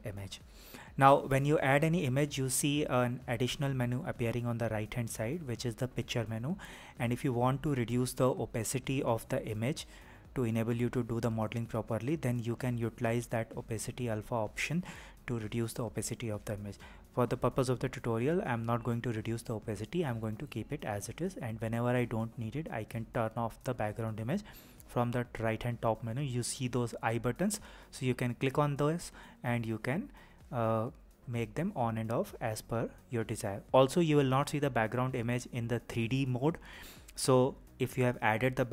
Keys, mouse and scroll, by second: 9.0 click, 12.5 click, 14.0-19.5 drag, 26.0-27.1 ctrl+scroll up 2, 27.1 ctrl+scroll down 2, 28.1-28.6 scroll up 2, 28.6-29.0 scroll up 3, 29.0-30.6 scroll down 3, 30.6-36.6 middle drag, 37.1 KP_1, 38.6-38.7 scroll up 2.